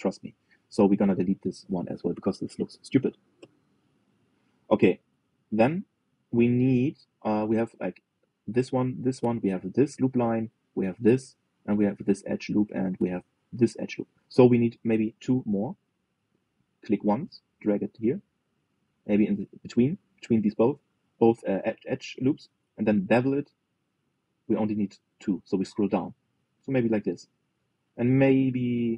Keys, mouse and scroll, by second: 1.7 click, 4.1 Delete, 7.3-9.8 middle drag, 13.5-15.8 middle drag, 15.8 ctrl+r, 23.1 ctrl+b, 28.8 g.